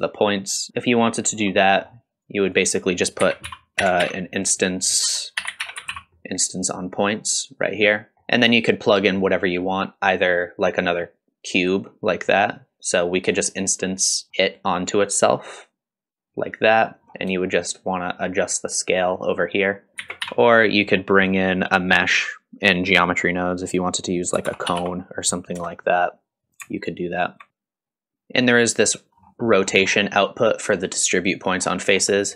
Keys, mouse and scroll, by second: 0.7-1.0 shift+middle drag, 1.3 scroll down 1, 1.6 middle click, 2.2 click, 2.8 click, 3.2 shift+a, 8.1 middle click, 8.1 scroll up 1, 8.4 click, 10.6 click, 12.2 middle click, 14.2 click, 14.3 middle click, 14.3-14.8 scroll down 2, 14.3 x, 15.3 click, 17.1-17.6 scroll up 1, 17.6-19.9 shift+drag, 19.9 ctrl+right click, 19.9 shift+middle click, 19.9 scroll up 2, 20.0 shift+a, 26.9 alt+right click, 27.5 shift+click, 29.2-29.5 scroll up 1, 29.5 middle click, 29.8-30.5 scroll up 2, 31.6-32.2 scroll down 3, 32.2 middle click.